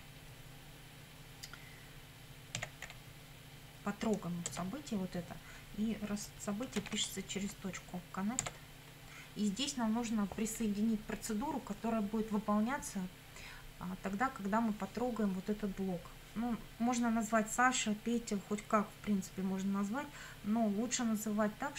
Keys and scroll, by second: 2.6 t, 2.9 o, 4.5 Tab, 6.8 shift+;, 8.4 Tab.